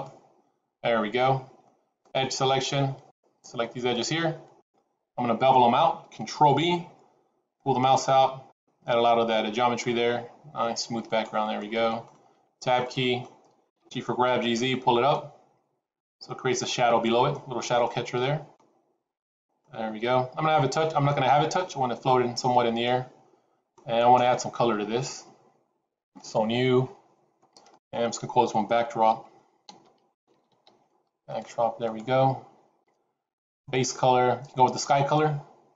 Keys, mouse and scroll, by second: 2.2 click, 2.9 click, 3.7 shift+click, 3.8 shift+click, 4.5 click, 6.4 ctrl+b, 11.5 middle click, 12.3 Tab, 12.7 middle click, 13.7 g, 16.7 middle click, 17.4 scroll up 2, 17.7 middle click, 20.5-21.5 scroll up 2, 22.8 middle click, 26.0 click, 27.7 click, 33.5 click.